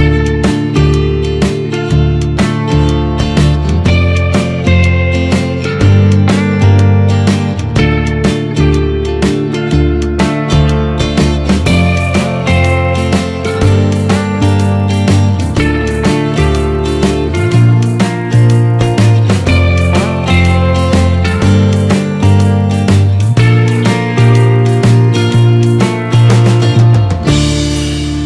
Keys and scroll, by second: 4.6 ctrl+-, 4.9 ctrl+0, 6.2 ctrl+=.